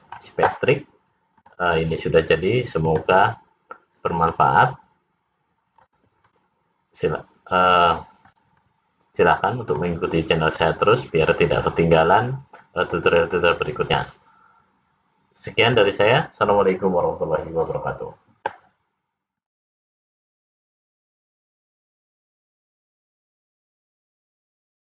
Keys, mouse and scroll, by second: 1.4 click, 3.5 click, 4.4 middle click, 6.3 middle click, 8.7 middle click, 10.7 middle click, 19.4 click.